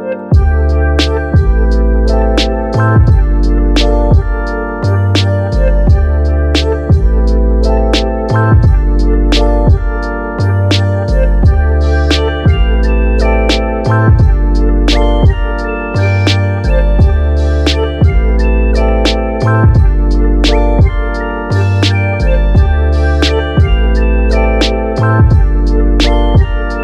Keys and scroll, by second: 25.0-25.8 typing.